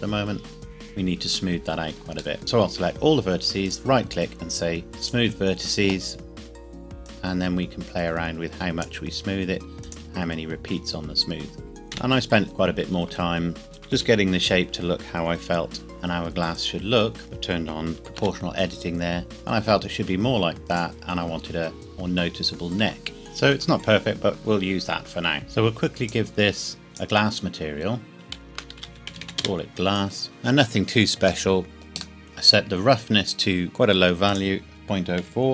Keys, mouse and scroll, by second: 0.2 scroll up 1, 2.4 a, 3.6 right click, 5.0 click, 11.7 Tab, 12.0 KP_1, 13.1 z, 13.6 a, 14.0 a, 15.8 b, 16.5 click, 17.2 o, 18.2 s, 20.6 click, 21.4 Tab, 22.2 scroll up 1, 22.8 Tab, 23.2 middle click, 23.8 scroll up 1, 24.3 click, 24.5 scroll down 1, 25.4 click, 28.3-29.2 typing, 29.4 Return, 30.2 scroll up 1, 31.2-32.2 scroll up 1, 32.2 middle click, 34.2 click, 34.5 click, 35.2 KP_Decimal.